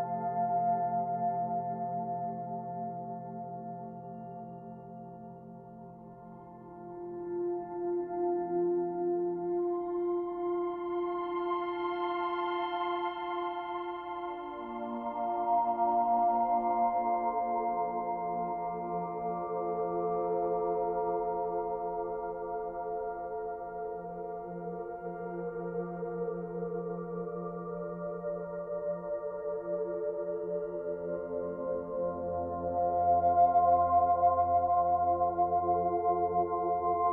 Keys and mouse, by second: 0.0 alt+click, 1.4 alt+click, 1.9 Page_Up, 2.4-4.0 alt+shift+drag, 4.2 shift+click, 5.5 click, 6.5 shift+click, 6.9 shift+click, 7.8 shift+click, 8.9-10.2 alt+shift+drag, 10.7 g, 10.9 y, 11.8 click, 12.3 Tab, 12.7-13.5 alt+middle drag, 13.5 alt+click, 14.8-15.9 alt+drag, 16.2 alt+click, 17.6 shift+click, 18.2 shift+click, 19.2 shift+click, 20.6-22.5 alt+shift+drag, 22.7-24.4 drag, 24.8 g, 25.1 y, 26.1 click, 26.7 ⇆, 27.3-28.5 alt+drag, 28.9 ⇆, 29.0 click, 29.4-32.2 alt+drag, 32.3 click, 33.1 shift+click, 34.8 alt+click, 35.6 alt+click, 36.1 s, 36.4 x.